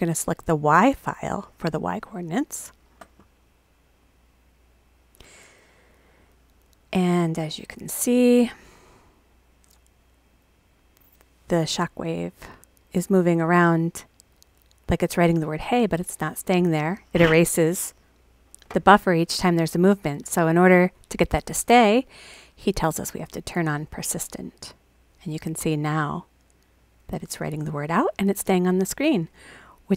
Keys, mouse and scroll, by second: 1.2 click, 2.5 click, 4.0 click, 7.7 click, 23.4 click.